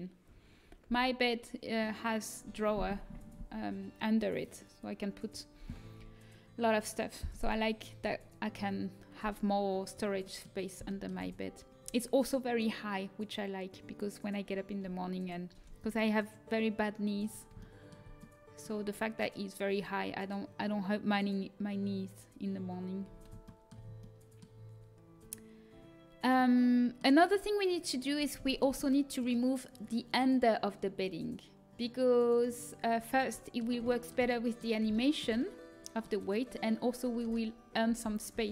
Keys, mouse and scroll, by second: 1.7-4.0 middle drag, 9.8-14.7 middle drag, 17.5-23.9 middle drag, 32.3-34.0 drag, 34.0-37.8 middle drag, 37.8 Tab, 38.2 Tab.